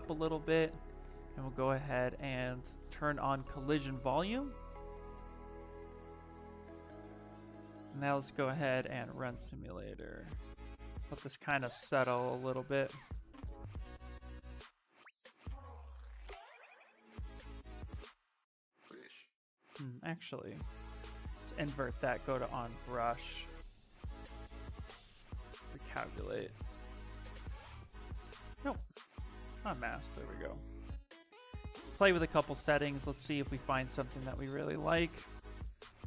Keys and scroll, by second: 15.1 Escape, 28.5 ctrl+z, 34.7 Escape.